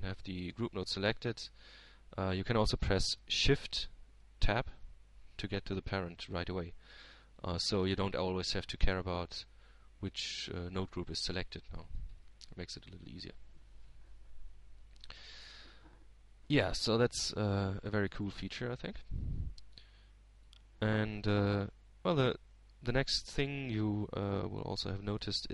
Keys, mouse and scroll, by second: 1.1 Tab, 2.5 click, 3.9-5.2 drag, 7.8 shift+Tab, 11.7-12.8 drag, 15.2 click, 20.3-22.2 drag, 22.6-23.8 drag, 24.1 click.